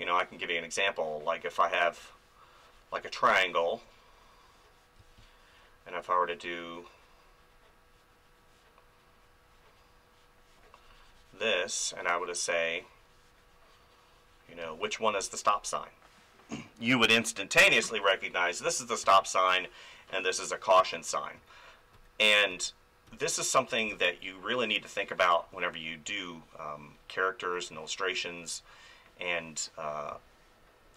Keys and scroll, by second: 5.0 space, 14.6 space, 19.0 space, 20.9 ctrl+z, 23.7 space, 30.1 space.